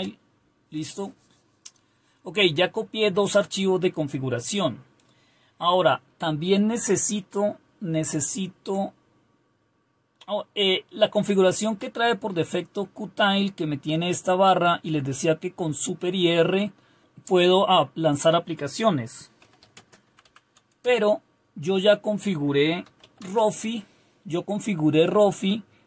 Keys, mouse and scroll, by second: 0.0-0.4 typing, 20.6-21.3 typing, 22.6-23.5 typing.